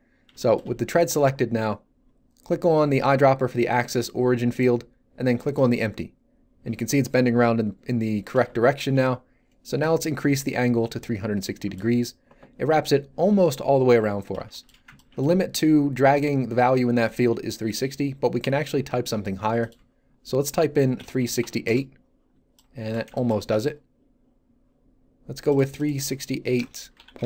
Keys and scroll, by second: 12.7 z, 21.0 3, 21.2 6, 21.4 8, 21.6 Return, 26.6 BackSpace, 26.9 ., 27.2 5.